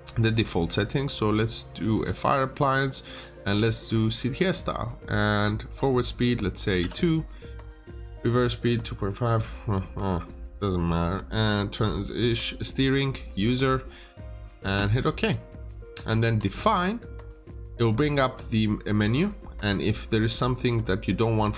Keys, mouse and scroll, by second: 6.7 typing, 7.6 click, 20.0 scroll up 1.